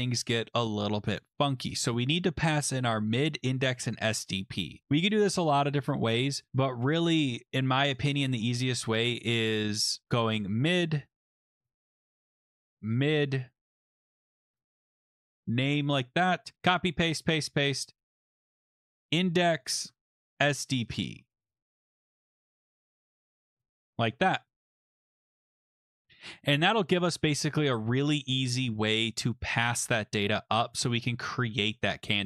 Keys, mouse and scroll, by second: 2.5 click, 8.0 click, 8.1 click, 9.8-10.8 typing, 11.2-11.5 Right, 11.6 Left, 11.7 Left, 11.8 Right, 11.9 Right, 12.0 Right, 12.0 Right, 12.2-15.3 typing, 15.6 Right, 16.5 ctrl+c, 16.6 ctrl+v, 18.1 click, 18.2 click, 18.5 ctrl+c, 18.9 click, 19.0 click, 19.0 ctrl+v, 19.5 click, 19.7 click, 19.9 ctrl+c, 20.2 click, 20.3 click, 20.4 ctrl+v, 20.9 click, 21.1 click, 21.2-24.2 typing, 22.2 click, 22.3 click, 24.1 click, 26.0-26.8 typing, 27.2 scroll.